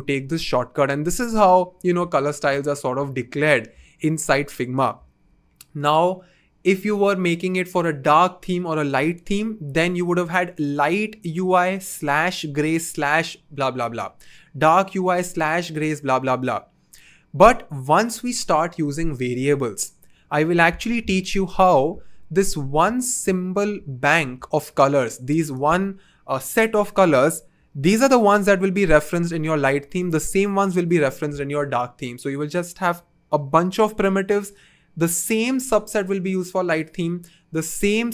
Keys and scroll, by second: 27.7 typing, 29.6 typing.